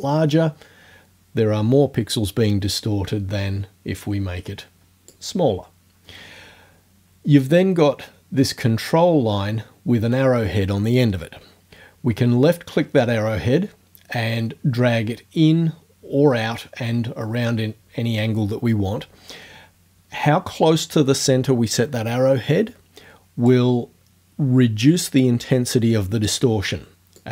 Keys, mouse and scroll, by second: 4.0-5.3 drag, 13.0-23.7 drag, 27.2-27.3 drag.